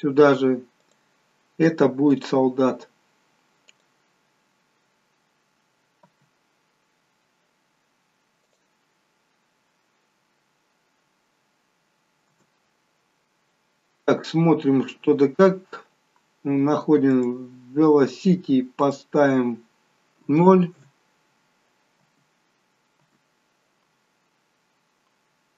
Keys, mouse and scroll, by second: 6.0 space, 8.6 click, 12.5 space, 15.4 scroll up 1, 17.1 click, 17.1-18.7 scroll up 2, 18.7 click, 21.9 space, 24.5 scroll down 2.